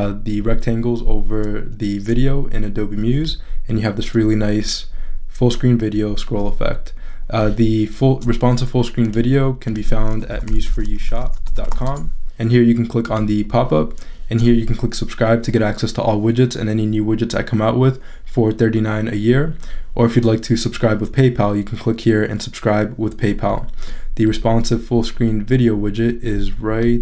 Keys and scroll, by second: 10.1-12.2 typing.